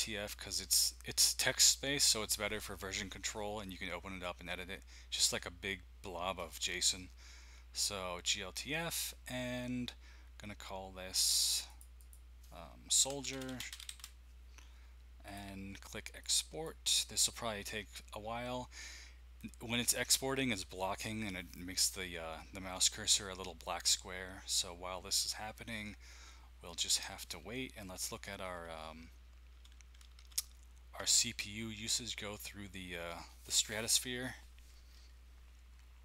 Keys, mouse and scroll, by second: 11.1 click, 11.3 click, 11.7 click, 12.0 click, 12.8-14.4 typing, 15.2 click, 16.2 click, 28.5 alt+Tab, 29.5 alt+Tab, 30.0 alt+Tab, 30.2 alt+Tab.